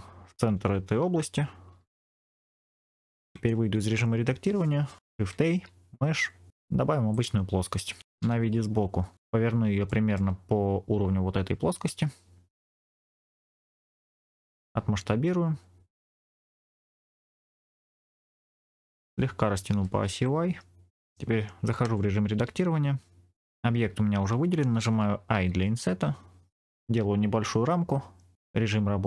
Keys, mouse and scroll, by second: 1.7 shift+s, 3.2 Tab, 5.2 shift+a, 8.1 KP_1, 9.1-9.6 scroll up 3, 9.8 shift+middle click, 12.8 r, 14.2 click, 14.7 s, 16.2 click, 17.1 middle click, 17.7 shift+middle click, 18.1 scroll up 2, 18.4 shift+middle click, 18.8-19.4 scroll down 2, 19.6 s, 20.1 y, 21.7 Tab, 23.3 middle click, 28.3 click.